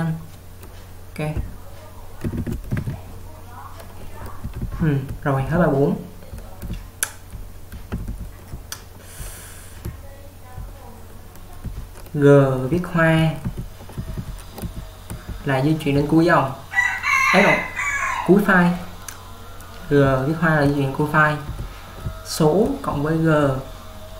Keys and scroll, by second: 2.4 typing, 2.8 alt+q, 4.5-10.6 typing, 11.7-15.9 typing, 18.7 typing, 20.2-23.4 typing.